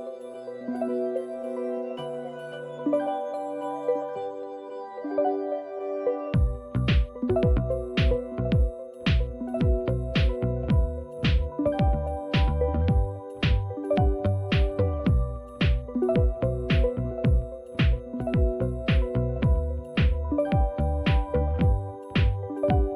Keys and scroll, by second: 5.4 typing, 7.2-18.2 typing.